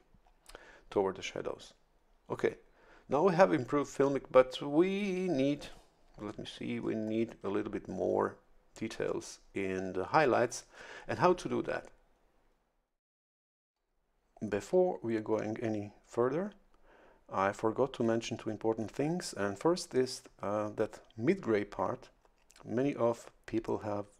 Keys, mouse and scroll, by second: 6.4-7.3 ctrl+scroll up 4, 10.3 ctrl+scroll down 2.